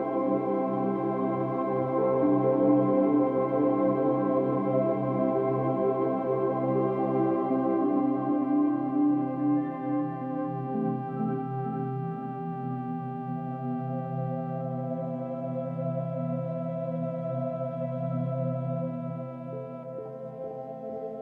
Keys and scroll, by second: 12.6 ctrl+z, 14.8 space.